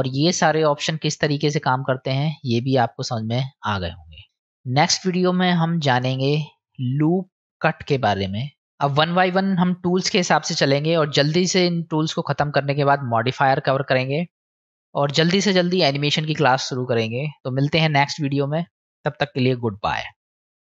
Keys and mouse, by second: 4.3 click, 11.2-13.5 middle drag, 13.5 click.